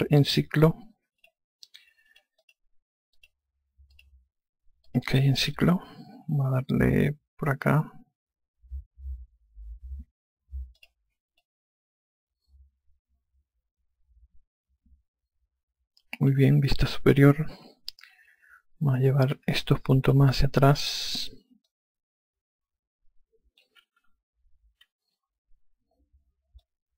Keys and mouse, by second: 1.8 click, 11.4 click, 12.0 alt+click, 17.6 F2, 19.9 5, 20.7 click, 22.3 click, 24.6 F1.